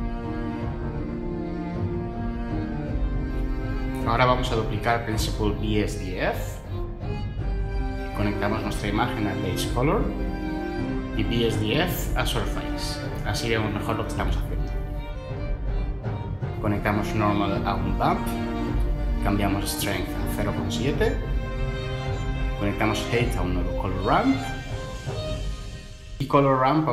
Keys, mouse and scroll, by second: 4.1 shift+d, 17.0 typing, 17.8 Return, 20.1 typing, 20.6 Return, 23.4-23.9 typing, 24.9 Return.